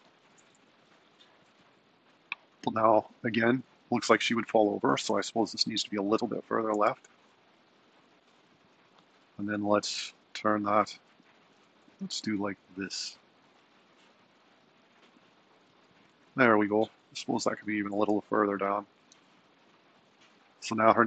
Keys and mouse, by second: 0.6 g, 3.8 super+Down, 4.3 super+Left, 4.9 g, 6.9 g, 10.0 r, 12.1 r, 14.5 r, 17.5 click, 18.1 g, 20.0 middle click.